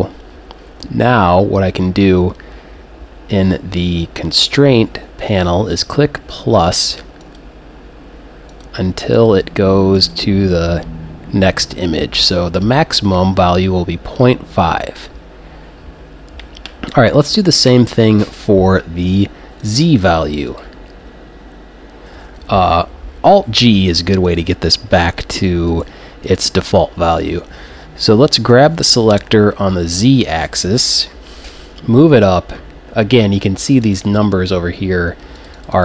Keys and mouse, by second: 5.7-14.2 drag, 19.6-22.5 drag, 23.8 alt+g, 24.3 click, 28.5 g, 34.0-35.8 drag.